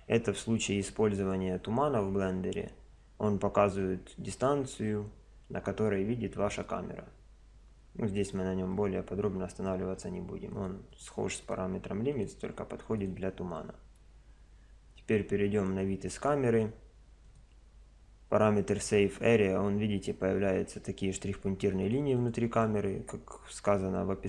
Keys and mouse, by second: 10.6-14.6 drag, 14.8-17.2 middle drag, 15.0 KP_0, 17.2 click, 21.8 click.